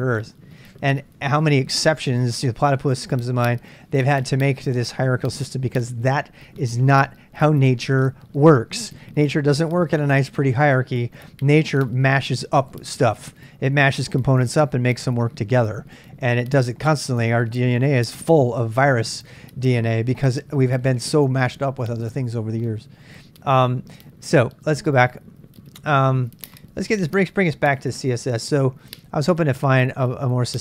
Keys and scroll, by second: 29.9 q.